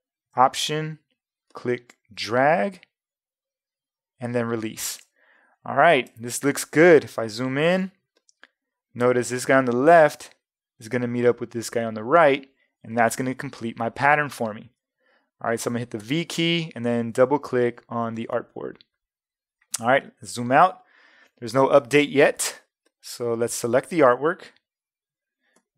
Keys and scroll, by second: 7.0 space, 16.0 v, 20.0 super+0, 21.9 super+-.